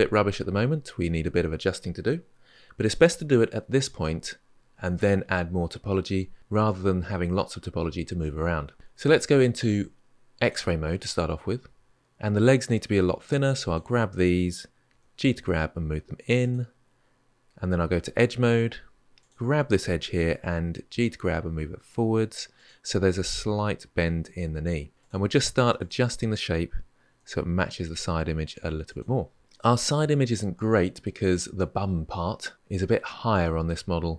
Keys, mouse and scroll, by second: 10.2-11.9 drag, 12.8 click, 14.7 g, 17.7 2, 19.0 alt+click, 20.6 g, 24.9 alt+click, 25.6 alt+click, 26.9 g.